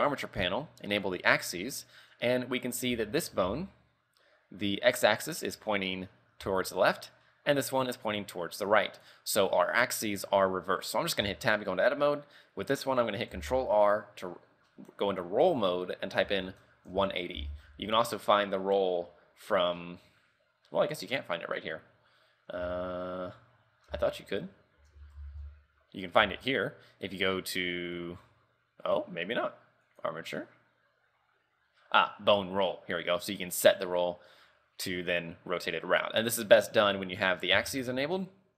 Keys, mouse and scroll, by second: 1.2 click, 1.5 scroll up 3, 1.8 middle click, 2.8 right click, 3.1 shift+middle click, 3.5 z, 3.7 middle click, 4.8 scroll up 2, 6.2 scroll down 3, 6.6 z, 7.0 right click, 7.3 middle click, 8.6 middle click, 11.3 Tab, 13.5 ctrl+r, 17.7 t, 19.5 scroll down 1, 19.9 scroll up 1, 22.7 w, 24.0 space, 30.0 click, 35.9 middle click, 37.5-37.9 scroll down 1.